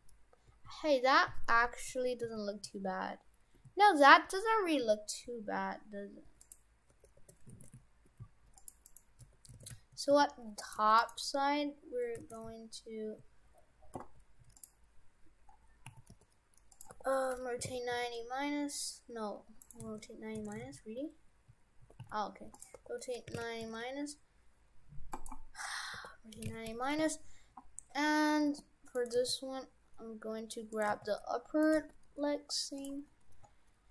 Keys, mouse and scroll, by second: 6.9 Tab, 7.2 Tab, 7.5 shift+f, 8.9 right click, 9.2 Tab, 9.6 shift+f, 10.8 Tab, 11.0 right click, 11.8-12.2 scroll down 2, 12.3 shift+f, 15.6 scroll down 3, 15.9 a, 16.1 g, 16.9 r, 19.9 shift+f, 20.5 shift+f, 22.8 r, 28.4 g, 29.1 g, 31.0 g, 31.9 g, 33.1-33.9 scroll up 8.